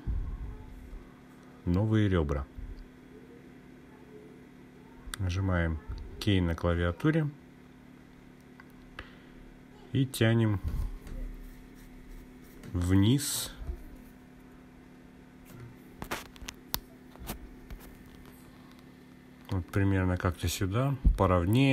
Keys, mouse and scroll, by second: 10.3 k.